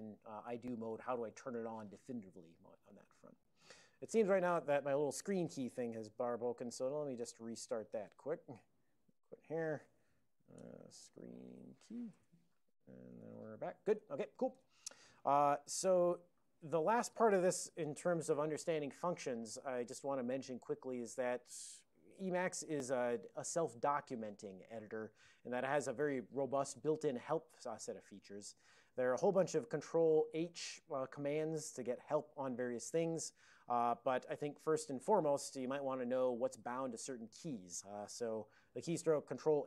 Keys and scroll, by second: 13.3 ctrl+n, 14.6 super+j.